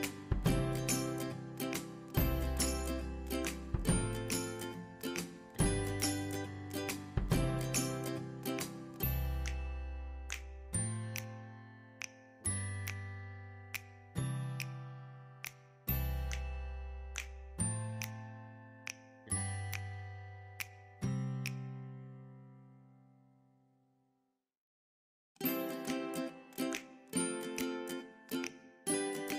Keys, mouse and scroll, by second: 0.5 click, 6.8 click, 6.9 click, 13.2 click, 17.6-18.4 scroll up 1, 18.4 click, 20.2 shift+F2, 24.1 click, 28.7-29.3 drag.